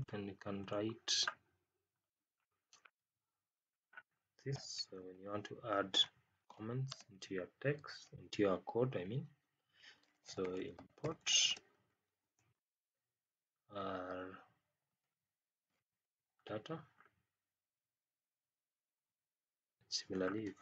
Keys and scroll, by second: 4.8 Up, 6.8 space, 11.4 space.